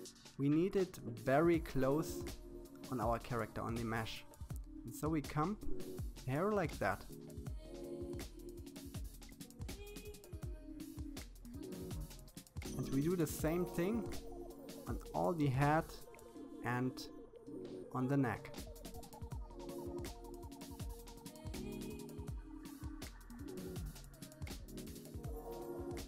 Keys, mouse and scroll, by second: 8.5-9.9 shift+middle drag, 10.6-12.2 drag, 12.8-14.4 shift+middle drag, 14.8-16.4 drag, 17.1-18.6 shift+middle drag, 19.0-20.7 drag, 24.1-24.5 scroll down 2, 24.5-25.6 shift+middle drag, 25.6-26.0 scroll up 2.